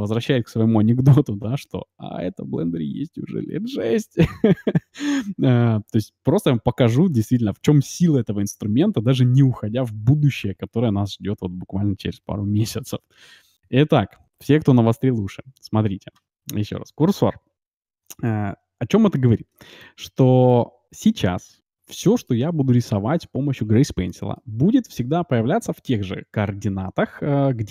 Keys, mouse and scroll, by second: 17.5-21.5 middle drag, 21.0-22.8 drag, 22.0-23.8 middle drag, 24.1-25.9 middle drag.